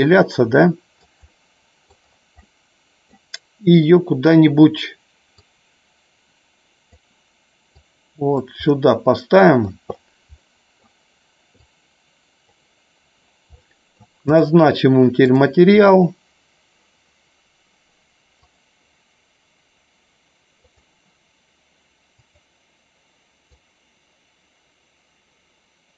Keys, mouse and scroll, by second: 1.2-1.8 middle drag, 2.4-3.0 middle drag, 5.3-6.9 drag, 7.8 click, 8.6 scroll up 1, 8.7-9.6 middle drag, 10.3 scroll up 1, 10.4-10.8 middle drag, 11.6-12.5 drag, 13.6-13.9 middle drag, 14.2 click, 15.7 click.